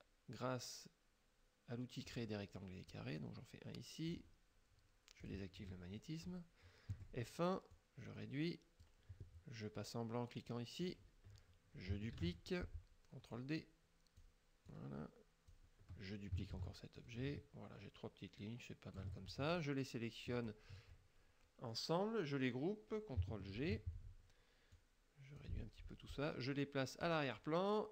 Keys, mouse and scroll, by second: 2.2 click, 3.0-4.4 drag, 5.3 click, 7.0 F1, 7.8 click, 10.9 click, 12.2 ctrl+d, 12.4 ctrl+click, 13.4 click, 14.7 click, 16.6 ctrl+d, 17.0-19.3 ctrl+drag, 19.6 ctrl+shift+click, 20.4 shift+click, 23.6 ctrl+g, 24.8 click, 27.1 click.